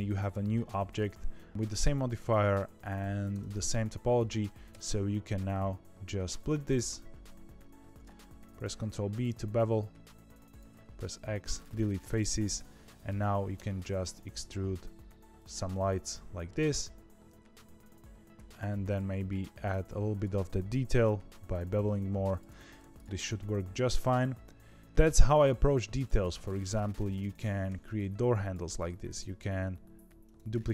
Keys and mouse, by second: 3.3 Tab, 4.6 ctrl+r, 7.8 ctrl+b, 10.6 x, 12.5 a, 12.8 click, 13.5 e, 15.8 shift+middle click, 18.3 2, 18.5 shift+click, 20.8 ctrl+b, 22.4 Tab, 23.0 middle click, 24.0 middle click, 25.0 shift+middle click, 25.9 click, 26.1 Tab, 26.3 middle click, 27.6 2, 29.3 shift+d.